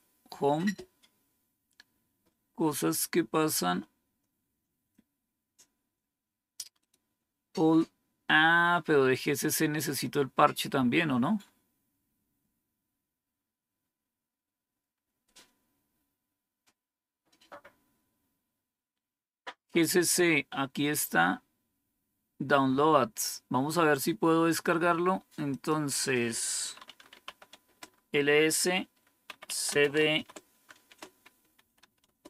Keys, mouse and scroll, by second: 1.7 scroll down 3, 3.2 scroll down 2, 6.7 click, 9.0-9.3 scroll down 4, 10.1-10.7 scroll down 4, 11.3 scroll down 3, 12.8-15.6 scroll down 4, 15.6-16.7 scroll down 1, 16.7-17.6 scroll down 1, 17.6 scroll down 1, 25.4 click, 26.8-27.7 typing, 28.9-32.2 typing.